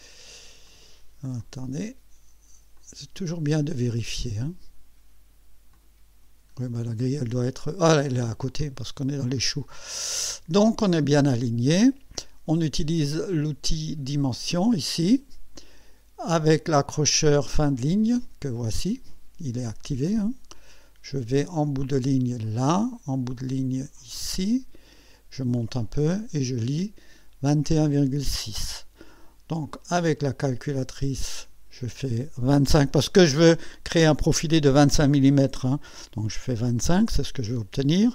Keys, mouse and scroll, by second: 0.7 click, 1.4 click, 2.8 click, 5.7 click, 6.4-7.5 scroll down 4, 7.8-8.2 scroll up 2, 9.1-9.4 scroll up 2, 11.3-11.6 scroll up 2, 14.7 click, 22.4 click, 24.3 click, 25.6 click, 26.2-27.4 scroll down 3, 29.6 click, 31.4 click, 36.1 2, 36.6 5, 37.5 /.